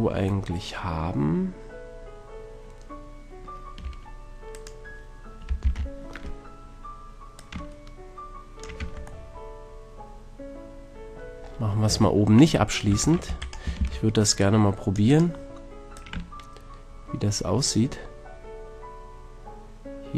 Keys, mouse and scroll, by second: 0.6-2.3 middle drag, 3.8 Tab, 4.5-6.5 right drag, 5.6 ctrl+l, 7.4-9.1 drag, 8.8 Tab, 10.0 middle drag, 11.0-11.6 middle drag, 11.9 Tab, 12.8 c, 13.6 a, 13.8 c, 15.9-17.2 middle drag, 17.2 click.